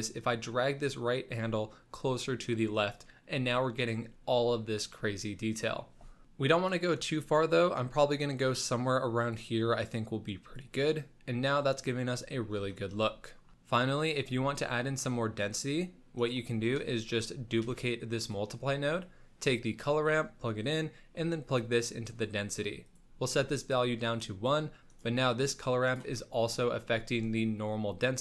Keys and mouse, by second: 0.1-2.6 drag, 7.4-9.3 drag, 9.8 click, 13.2 shift+middle drag, 14.3 middle click, 15.0 middle click, 15.4 click, 16.8 middle click, 17.5 shift+d, 18.9-20.1 drag, 20.8-22.2 drag, 22.8 click, 24.2 click, 24.7 middle click, 24.8 click, 25.3 click, 26.1 middle click, 26.8 middle click.